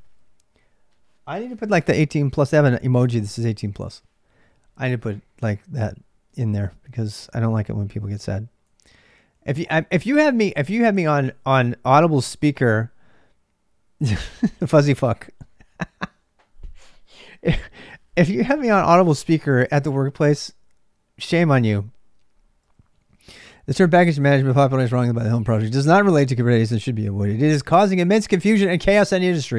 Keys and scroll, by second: 0.0-29.5 typing.